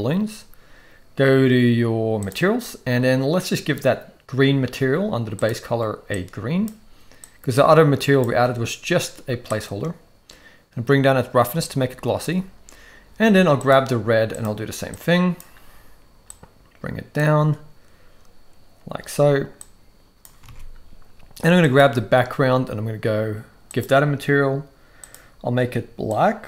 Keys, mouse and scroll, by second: 5.3 click, 9.5-12.3 drag, 13.6 click, 16.3-20.4 drag, 20.4 alt+a, 21.6 click, 23.7 click, 25.0 click.